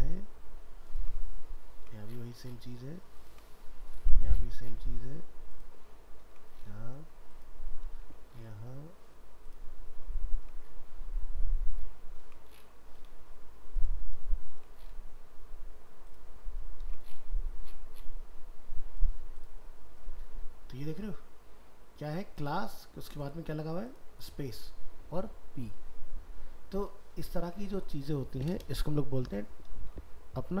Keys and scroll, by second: 1.7 ctrl+w, 12.2 ctrl+w, 27.4 ctrl+w, 29.6 ctrl+Home.